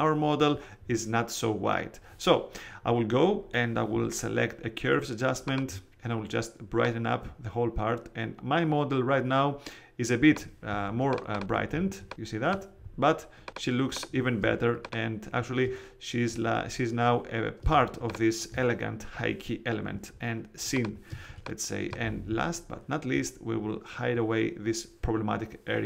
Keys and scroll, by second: 10.6 space, 14.3 space, 17.6 space, 21.0 space.